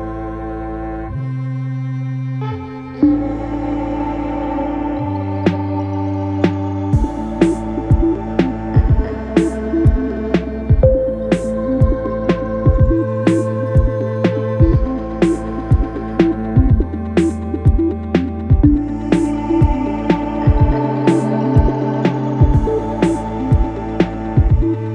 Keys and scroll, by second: 15.4 4, 18.4 3, 20.2 ], 23.8 4.